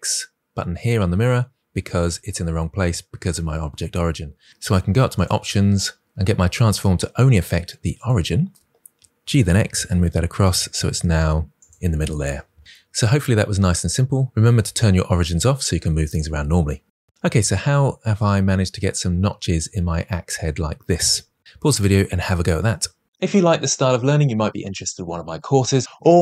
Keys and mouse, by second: 5.1-8.2 drag, 9.1 g, 9.3 x, 14.4-16.8 drag.